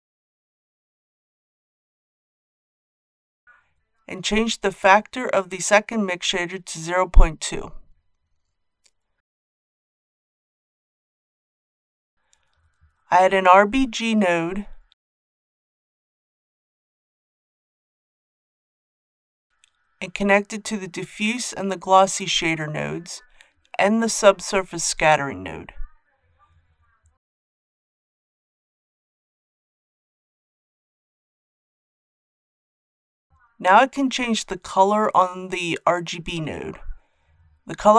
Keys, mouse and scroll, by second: 0.0 shift+middle click, 5.5 click, 6.1 KP_Decimal, 6.4 KP_2, 13.0 shift+a, 16.2-37.6 drag.